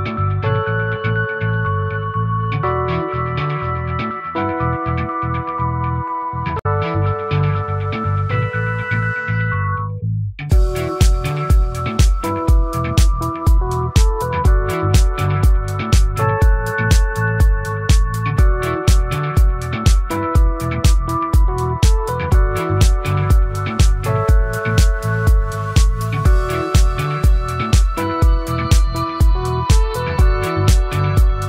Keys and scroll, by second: 4.0 ctrl+z, 21.5 ctrl+z.